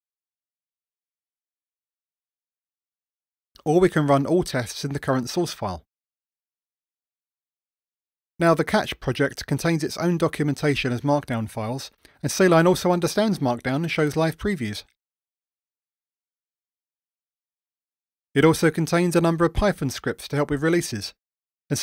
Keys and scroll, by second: 2.0 ctrl+shift+r, 6.4 ctrl+shift+r, 12.6 ctrl+shift+super+F12.